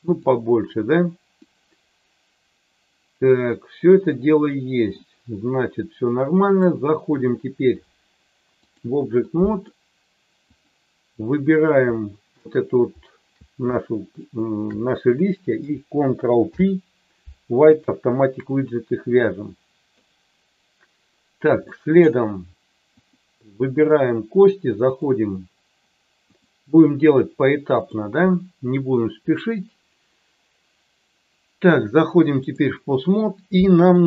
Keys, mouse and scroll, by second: 1.3-4.9 middle drag, 6.5-8.8 drag, 9.3 middle click, 10.5 click, 14.1 shift+click, 16.4 ctrl+p, 19.1 middle click, 21.7 middle click, 23.0 click, 23.7 click, 24.8 click, 27.8-32.6 drag, 33.4 middle click.